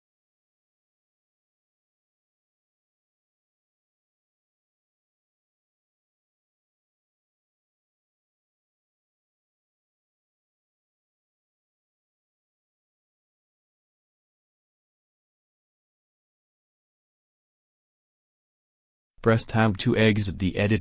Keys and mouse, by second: 1.1 f, 1.4 a, 3.1 click, 5.9 e, 6.4 click, 7.7-10.7 middle drag, 8.9 e, 10.7 alt+m, 19.7 Tab.